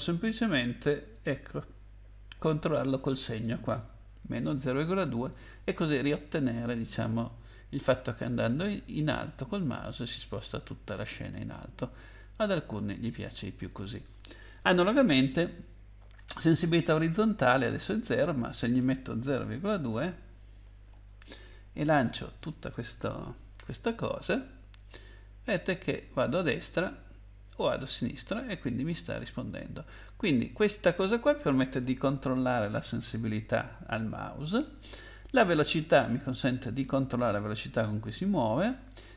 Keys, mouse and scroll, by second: 1.1 click, 2.3 -, 5.2 click, 12.6 click, 13.7 click, 14.5 BackSpace, 18.5 click, 19.3 ., 19.8 2, 20.8 ctrl+s, 22.4 click, 29.5 click, 30.3 click.